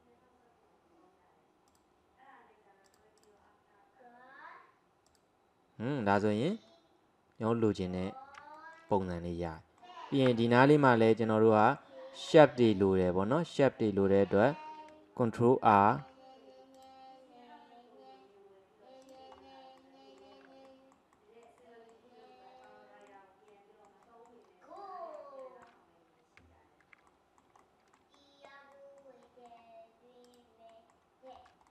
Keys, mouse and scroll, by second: 2.9-5.2 drag, 6.1 scroll down 2, 6.3-10.3 middle drag, 10.3 Tab, 10.5 middle click, 11.2 scroll up 1, 11.5-14.3 middle drag, 14.3-15.9 scroll up 1, 15.9 ctrl+r, 19.4-19.8 scroll up 1, 19.8-24.5 middle drag, 24.5-24.8 scroll down 1, 24.8-30.3 middle drag, 30.3 click, 30.7 middle click, 31.4-31.7 scroll up 1.